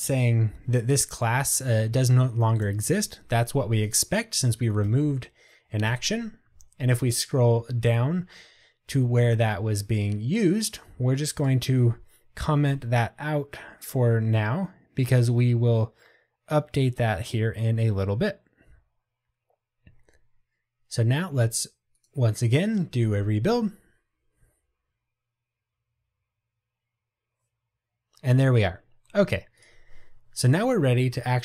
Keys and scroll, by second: 12.8 super+/.